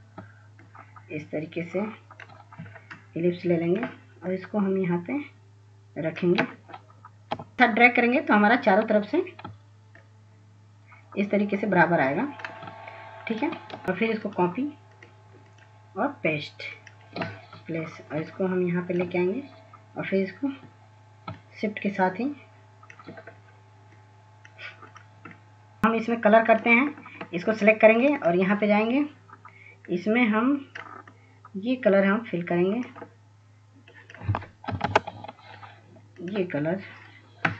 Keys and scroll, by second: 35.3-36.5 typing.